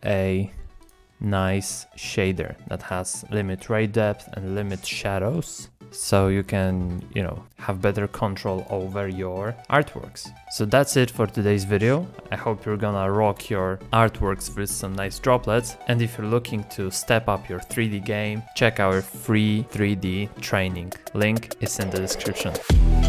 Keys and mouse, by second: 0.8 click, 1.8 middle click, 2.8 middle click, 5.7-6.1 drag, 6.4 click, 7.2-8.1 drag, 8.6 click, 11.0 z, 12.2 shift+click, 12.4 z, 12.6 z, 13.6 x, 13.7 n, 14.4 click, 14.6 shift+click, 15.2 shift+click, 15.7 shift+click, 15.9 click, 16.2 click, 16.3 KP_0, 16.6 shift+middle click, 16.7 middle click, 17.4 click, 18.8 middle click, 20.8 middle click, 21.0 middle click, 21.1 middle click, 21.7 middle click, 21.8 shift+click, 22.2 click.